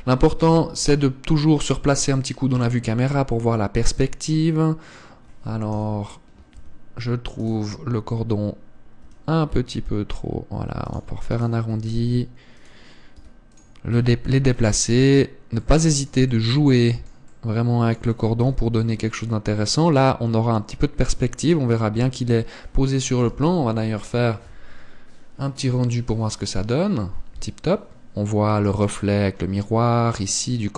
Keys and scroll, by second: 0.3 Tab, 1.1 KP_0, 6.4 KP_7, 7.3 Tab, 12.3 r, 13.8 s, 15.7 Tab, 19.1 KP_0.